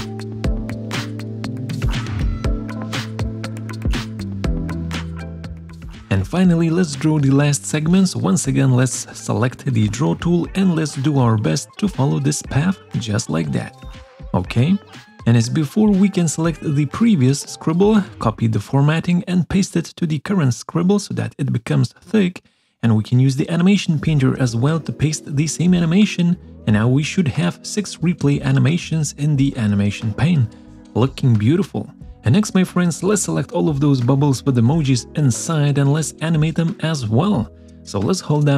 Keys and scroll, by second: 2.8 ctrl+shift+c, 3.2 ctrl+shift+v, 3.5 ctrl+shift+[, 17.0 ctrl+shift+[, 17.6 ctrl+shift+c, 18.3 ctrl+shift+v, 19.3 ctrl+shift+[.